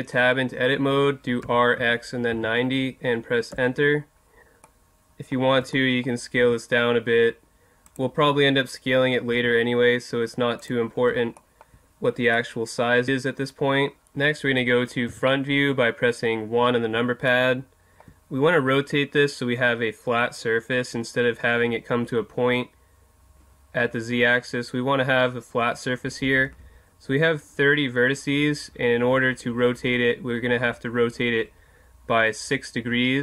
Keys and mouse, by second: 1.4 r, 4.6-7.6 middle drag, 6.4 s, 7.9-9.8 drag, 9.3 s, 11.4-14.1 middle drag, 15.1 KP_1.